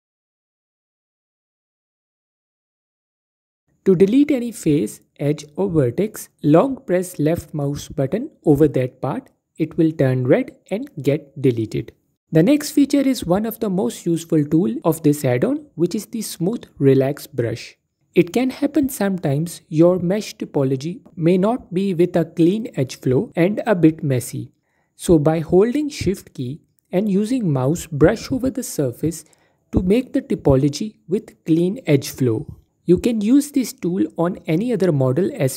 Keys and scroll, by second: 1.8 typing, 6.9 typing, 14.7 typing, 27.8 typing.